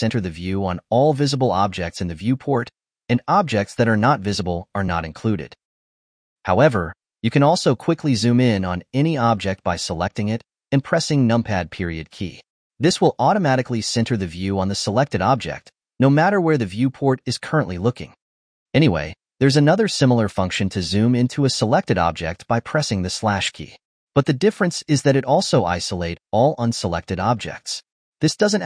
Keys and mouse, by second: 3.6 Home, 5.6 alt+h, 6.0 click, 6.8 Home, 7.4-9.0 middle drag, 9.9 click, 10.9 KP_Decimal, 12.4 click, 12.8 KP_Decimal, 13.7 click, 13.9 KP_Decimal, 15.0-16.8 shift+middle drag, 16.8 KP_Decimal, 17.0-21.0 middle drag, 21.0 click, 23.4 /, 25.2-28.2 middle drag, 28.3 alt+h, 28.4-28.6 alt+h.